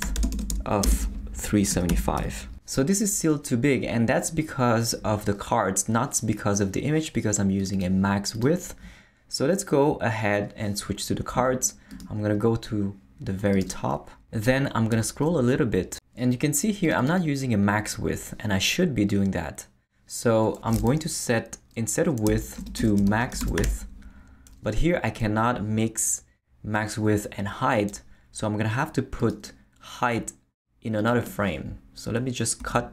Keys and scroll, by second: 0.0-2.7 typing, 22.0-24.1 typing, 32.6 super+x.